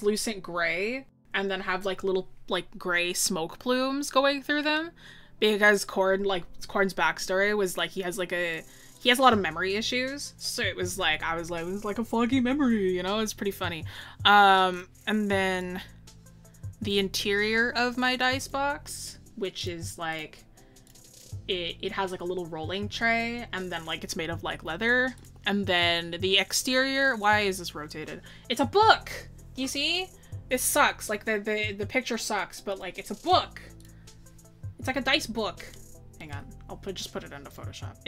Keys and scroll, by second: 0.3-2.2 scroll up 1.